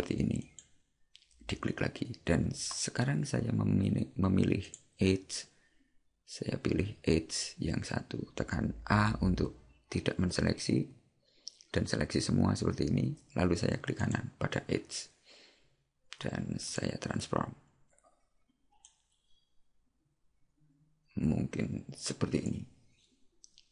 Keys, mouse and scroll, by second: 4.7 click, 14.1 right click, 16.7 click.